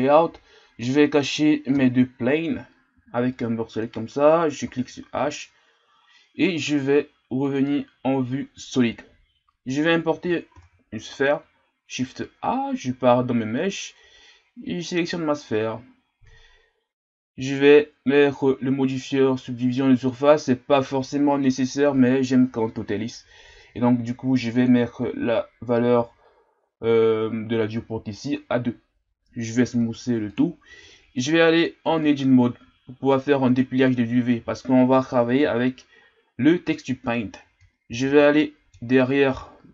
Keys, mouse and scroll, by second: 0.9-1.7 middle drag, 1.7 KP_1, 3.8 b, 5.1 h, 7.5 click, 16.2 scroll down 5, 17.1-18.1 scroll up 1, 20.2-30.4 drag, 30.4 w, 31.9 Tab, 37.9 ctrl+KP_1, 39.0-39.4 ctrl+scroll down 5, 39.4-39.7 scroll up 1.